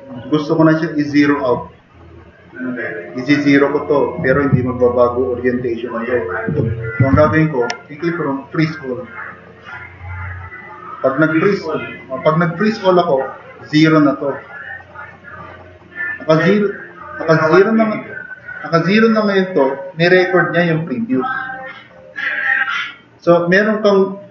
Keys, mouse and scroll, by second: 5.1 click, 7.3 super+-, 12.1 click, 12.5 click.